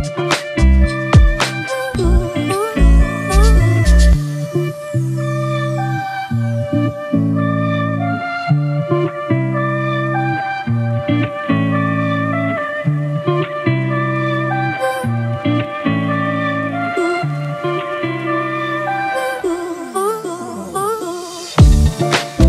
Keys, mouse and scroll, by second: 5.2 ctrl+click, 12.2 alt+BackSpace, 13.2 ctrl+d, 18.5 ctrl+t, 21.8 ctrl+-, 22.1 ctrl+-.